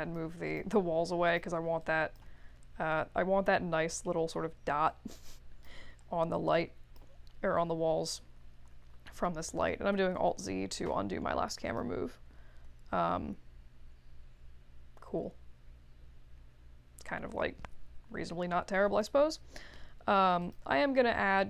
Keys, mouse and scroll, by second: 0.4 click, 1.2 click, 1.8 alt+click, 2.4 middle click, 2.9 w, 3.7 middle click, 4.8-5.6 drag, 6.3-6.9 drag, 8.0 ctrl+z, 8.7 alt+z, 8.9 alt+z, 9.2 alt+z, 9.5 alt+z, 9.9 alt+z, 11.6 click.